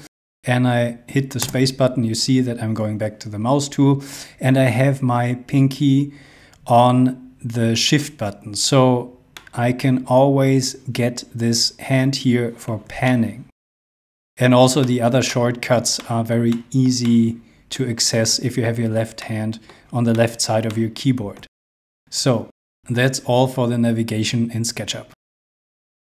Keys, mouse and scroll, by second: 1.4 space, 9.4 middle click, 13.0 shift+middle click, 13.8 shift+middle click, 14.8 shift+middle click, 16.5 shift+middle click, 20.6 shift+middle click, 21.7-22.5 scroll up 1, 22.6 shift+middle click, 24.8-25.3 scroll up 1, 25.3 scroll down 1.